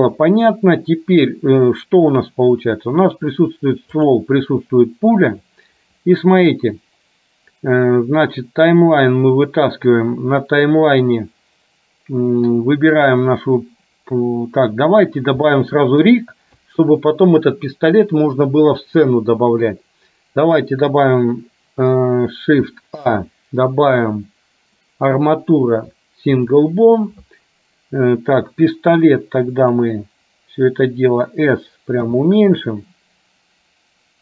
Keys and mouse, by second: 4.1 click, 8.8 click, 10.6 middle click, 13.1 click, 15.6 shift+middle click, 26.1 shift+a, 29.0 click, 32.1 s.